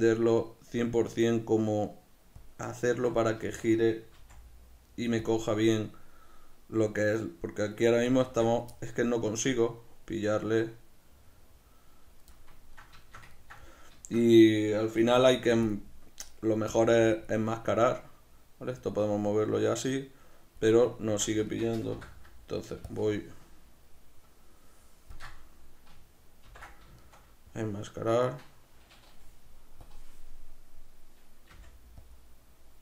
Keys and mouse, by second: 2.6-5.4 drag, 3.8 z, 5.6-7.1 middle drag, 7.1-8.8 drag, 8.6 ctrl+z, 8.8-15.2 middle drag, 15.2 f, 15.8 click, 16.8 f, 17.4 click, 18.0-21.5 drag, 21.1 ctrl+z, 21.5-22.9 shift+middle drag, 22.0 m, 22.9-27.1 ctrl+shift+drag, 26.5 ctrl+i, 27.1-29.9 shift+middle drag, 29.9-32.2 drag, 31.6 f.